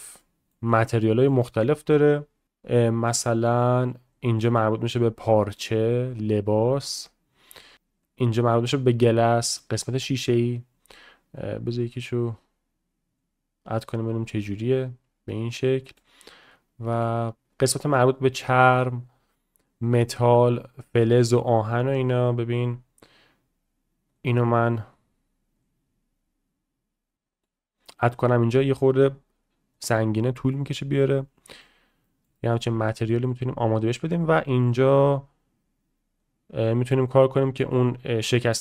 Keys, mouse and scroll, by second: 0.2-0.5 middle drag, 0.7 click, 1.0 shift+middle click, 2.4-4.2 drag, 4.7-8.1 drag, 8.3-9.8 drag, 10.3-11.4 drag, 13.7 right click, 14.4-16.0 shift+middle drag, 16.9 middle click, 17.5-18.7 right drag, 18.9-19.6 right drag, 19.8-24.2 right drag, 24.9 right click, 30.5-31.7 middle drag, 32.0 shift+middle drag, 32.3 middle drag, 32.7 shift+middle drag, 33.0 middle click, 34.2-35.8 drag, 36.2-37.7 drag.